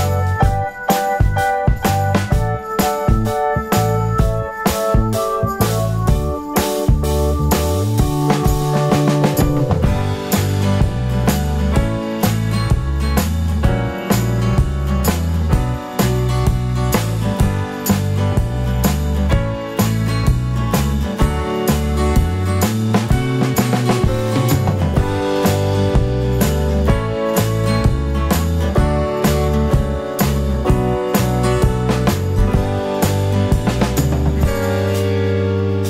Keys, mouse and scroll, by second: 0.0 click, 0.8 alt+d, 1.5 click, 3.7-4.9 drag, 3.7 g, 4.9 g, 5.6 click, 6.1 z, 6.2 click, 9.8 alt+d, 11.0 click, 15.2-20.3 drag, 18.2-18.5 scroll down 1, 20.3 g, 20.7 right click, 21.1 g, 21.3 right click, 22.1-26.5 drag, 22.3 scroll up 1, 22.5-23.0 scroll down 1, 25.4 alt+d, 27.1-28.7 drag, 28.7 g, 30.9 click, 34.1-34.7 scroll up 2, 34.7 KP_Decimal.